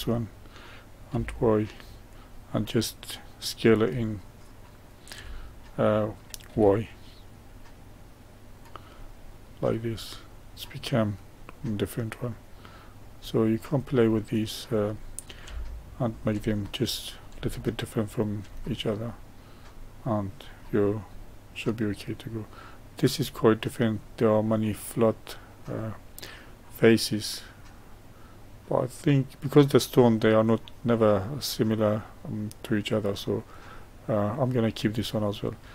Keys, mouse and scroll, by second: 2.5-5.1 middle drag, 5.1 s, 8.9-13.5 middle drag, 13.5 click, 14.0-21.1 middle drag, 21.1-21.7 scroll up 1, 21.7-28.3 middle drag, 30.6-33.6 middle drag, 34.6-35.7 middle drag.